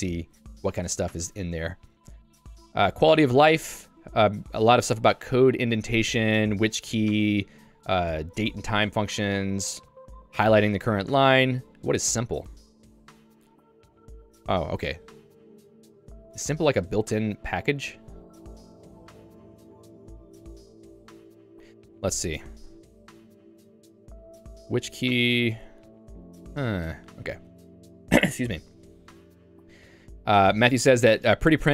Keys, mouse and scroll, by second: 0.0 j, 0.6 h, 1.2 Tab, 1.8 j, 6.0 ctrl+d, 6.4 ctrl+d, 11.7 ctrl+u, 12.5 j, 16.2 l, 16.9 l, 22.9 j, 23.6 ctrl+d, 24.1 j, 25.5 ctrl+d, 26.5 k.